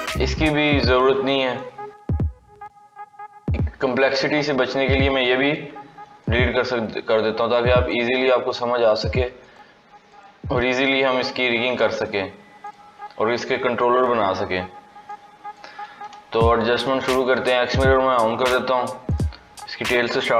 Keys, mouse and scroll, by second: 0.3-2.0 middle drag, 2.0 KP_3, 2.7-3.3 scroll down 3, 3.3-4.1 scroll down 4, 4.1-4.5 scroll up 4, 4.5-5.4 middle drag, 5.4 x, 7.3-8.8 drag, 9.3 click, 10.0 click, 10.8 click, 11.9-12.6 drag, 13.4-14.8 scroll down 2, 15.0 click, 15.8 scroll down 2, 16.3-17.6 shift+middle drag, 17.6 click, 18.1 scroll up 4, 19.0 click, 19.3-19.8 scroll down 1, 19.8 scroll up 1.